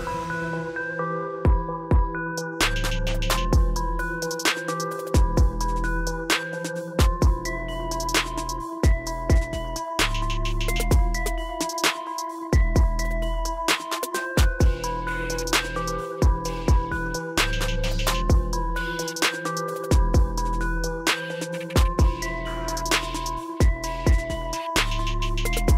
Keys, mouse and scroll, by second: 19.0 super+t.